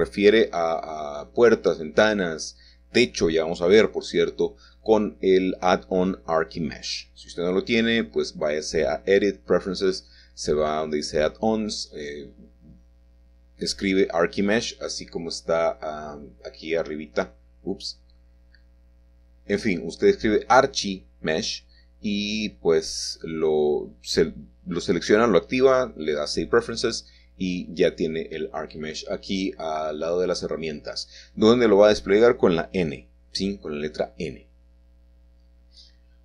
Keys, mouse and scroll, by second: 0.0 click, 0.4-0.7 scroll down 2, 1.4 middle click, 1.8-2.4 scroll up 3, 2.4-5.3 shift+middle drag, 5.3-8.7 middle drag, 9.0-9.9 scroll down 2, 10.3 scroll down 1, 10.4 middle click, 11.2-12.2 scroll up 1, 15.1 click, 16.5 click, 17.6 Escape, 18.6 k, 18.8 click, 20.4 shift+click, 21.0 shift+click, 22.0 shift+click, 22.8 click, 23.0 click, 23.0 typing, 23.3 click, 23.5 middle click, 24.3 scroll up 2, 24.4-25.0 scroll down 4, 24.7 middle click, 26.2 click, 26.5 middle click, 26.8 click, 26.9 click, 26.9 middle click, 27.2 click, 27.8 shift+middle click, 28.1 shift+click, 28.2 shift+middle click, 28.5 scroll down 1, 28.8 middle click, 29.2 middle click, 29.3-30.3 scroll down 2, 29.9 middle click, 30.3 shift+middle click, 30.9 click, 31.1 middle click, 31.6 shift+click, 31.7 shift+middle click, 32.1 2, 32.5 shift+click, 33.1 f, 33.2 middle click, 33.8 F3, 33.8 shift+click, 34.0 shift+middle click, 34.3 shift+middle click, 34.3 shift+click, 34.5-34.9 shift+scroll down 1.